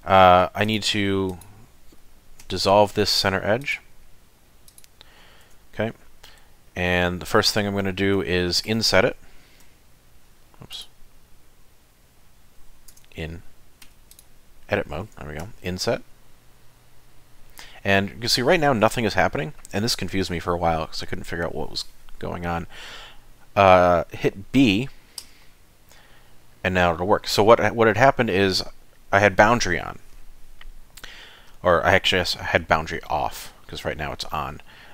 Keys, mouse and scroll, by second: 0.7 alt+click, 1.3 alt+click, 2.4 x, 4.0 middle click, 4.7 click, 5.5 Tab, 7.1 middle click, 8.3 shift+middle click, 10.3 i, 10.7 click, 12.9 Tab, 13.9 3, 14.1 click, 15.4 i.